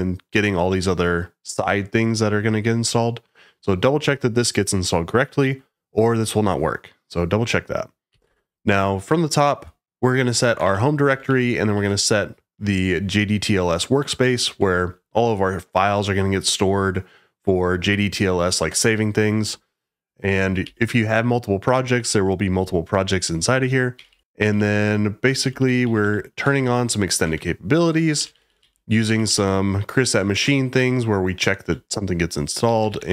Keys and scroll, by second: 8.1 g, 10.3-12.2 typing, 14.4 Escape, 20.2 j, 20.6 k, 23.9-29.7 typing, 27.2 Escape, 30.3 Escape, 30.7 Escape, 31.6-33.1 typing.